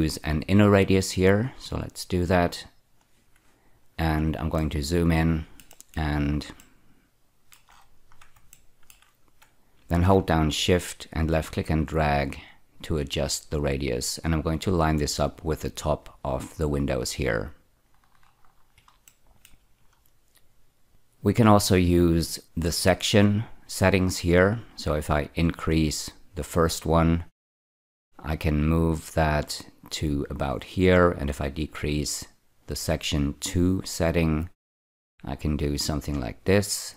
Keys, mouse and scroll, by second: 4.5 ctrl+middle click, 5.6 ctrl+middle click, 6.5 ctrl+middle click, 8.5 shift+middle click, 11.3-15.4 shift+drag, 17.8-18.7 scroll down 8, 19.0 shift+middle click, 19.7-20.9 scroll down 2, 24.9-26.3 drag, 31.1 click.